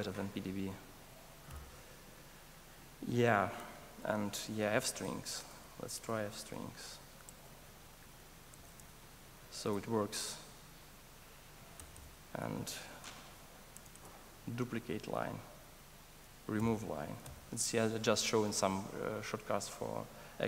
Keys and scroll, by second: 1.5 alt+super+r, 10.0 super+s, 13.7 super+s, 13.8 super+d, 16.6 super+BackSpace.